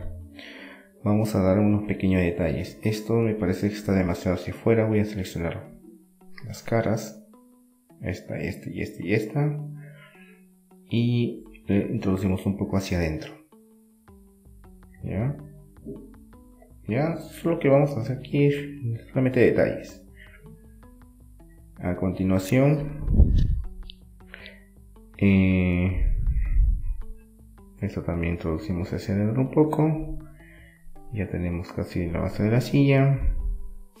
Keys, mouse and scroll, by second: 4.3-5.9 middle drag, 5.9 right click, 6.7 right click, 7.0-8.1 middle drag, 8.1 click, 8.1 right click, 8.2-9.6 middle drag, 11.0-13.4 middle drag, 13.7-15.7 drag, 17.4 Tab, 17.5 middle click, 20.8 middle click, 21.4-22.7 drag, 22.7-24.6 middle drag, 28.7 click, 29.7-34.0 middle drag.